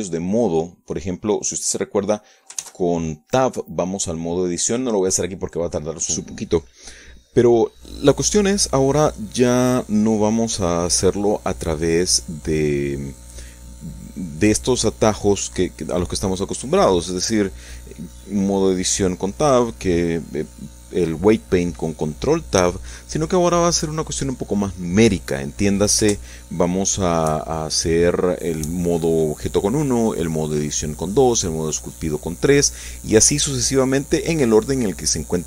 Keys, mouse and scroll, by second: 0.9 f, 1.7 click, 4.8 ctrl+s, 5.0 ctrl+click, 9.2 click, 9.9-15.1 drag, 17.1 middle click, 18.1 shift+middle click, 19.2 f, 20.2 click, 21.3 click, 22.3-25.5 ctrl+drag, 25.7 ctrl+click, 27.9 click, 28.9 click, 29.7-30.9 drag, 32.5 middle click, 32.9 shift+click, 33.1 shift+click, 33.1 shift+middle click, 35.1 f.